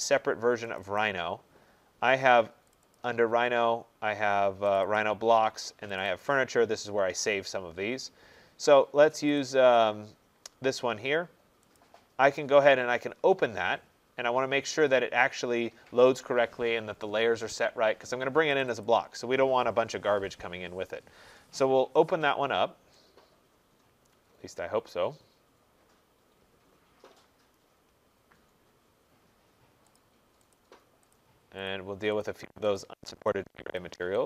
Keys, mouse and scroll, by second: 1.0 click, 2.7 click, 3.0 click, 4.7 click, 4.9 click, 6.0 click, 6.2 click, 9.3 click, 9.5 click, 11.8 click, 18.6 click, 18.8 click, 30.0 click, 30.5 click, 31.1 click, 31.7 click, 32.2 click, 32.8 click, 33.3 click, 33.8 click.